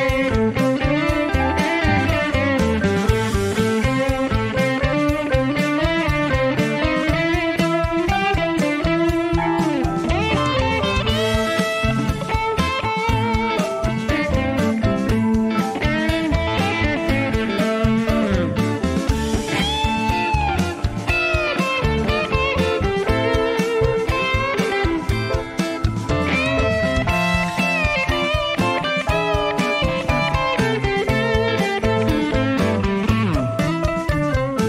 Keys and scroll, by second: 6.6 0, 15.0 F12, 16.5 Escape, 31.6 n.